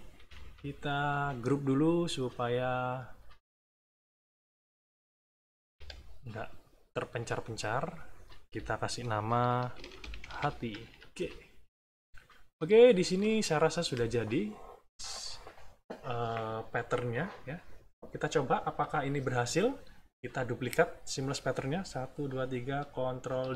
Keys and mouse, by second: 0.1 -, 1.5 click, 2.5 click, 3.4 shift+click, 4.0 shift+click, 5.6 ctrl+g, 7.4 click, 7.9 click, 9.5-10.8 typing, 12.5 click, 23.4 ctrl+d.